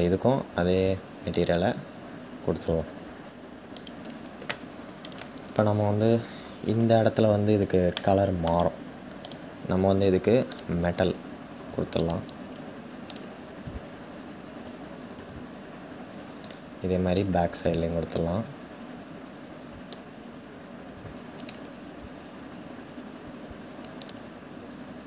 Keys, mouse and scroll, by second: 3.5-4.7 drag, 5.7-7.6 scroll up 7, 7.6-8.9 shift+middle drag, 8.9 click, 11.7-12.8 drag, 13.0-15.5 scroll down 5, 15.5-16.9 scroll down 4, 16.9 click, 19.6-21.7 drag, 21.7-23.7 scroll up 5, 23.7 click.